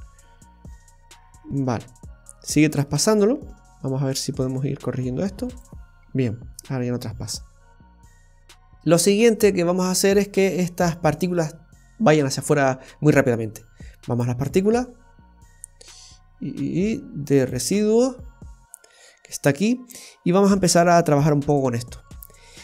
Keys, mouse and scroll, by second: 0.2 middle click, 5.5 click, 6.5 middle click, 7.4-7.9 scroll up 2, 8.0 middle click, 14.1 click, 14.5-14.8 scroll down 2, 15.3 scroll down 1, 17.4 click, 18.3 scroll down 3, 20.0 scroll up 2.